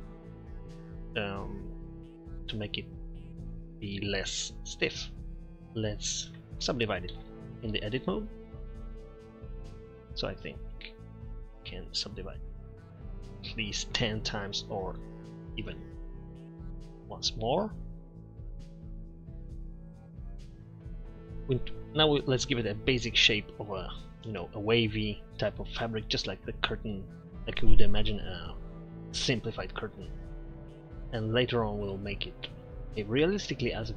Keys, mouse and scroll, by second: 6.3 Tab, 7.1 w, 15.7 t, 16.5 t, 18.4 shift+w, 19.0 w, 19.4 w, 20.5 Tab, 20.7 Tab, 30.9-32.7 middle drag.